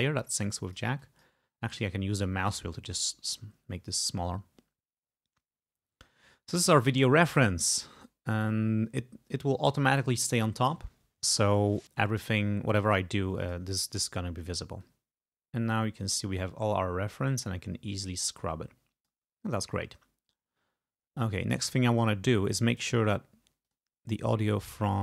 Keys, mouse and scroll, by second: 1.7-2.1 scroll down 1, 2.3 scroll up 1, 2.6 scroll down 1, 2.9-3.3 scroll up 1, 3.3 scroll down 1, 3.7 scroll up 1, 4.2 scroll down 1, 5.2 scroll up 2, 5.7-6.2 scroll up 2, 6.6-7.7 drag, 7.7 scroll up 2, 8.5-10.0 drag, 12.9 click, 13.4 click, 14.9-19.3 drag, 21.7 click, 22.8 click, 23.7 click.